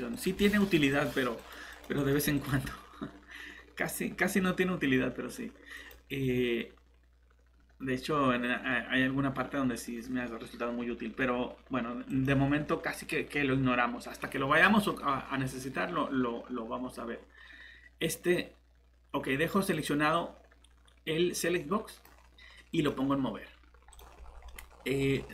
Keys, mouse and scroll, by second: 24.2 scroll down 1, 24.5 middle click, 25.2 scroll up 1.